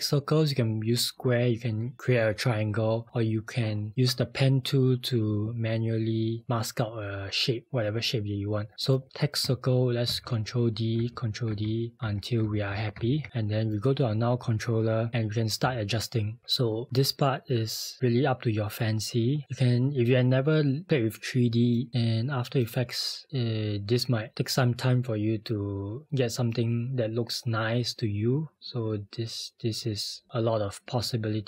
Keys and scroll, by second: 10.1 ctrl+d, 11.0 ctrl+d, 11.8 ctrl+d, 12.5 ctrl+d, 12.7 ctrl+d, 15.7 r.